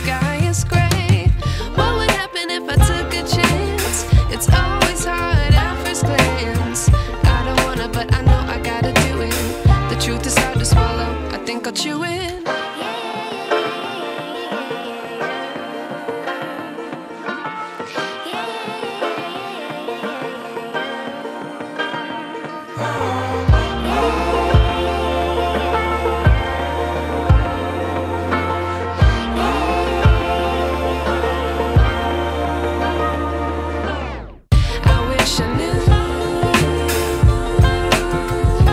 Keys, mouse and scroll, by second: 4.1 click, 10.7 click, 23.7 click.